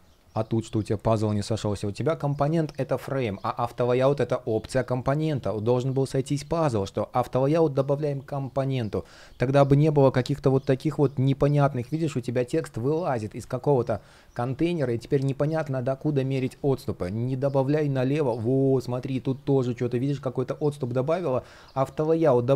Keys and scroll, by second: 18.6 space.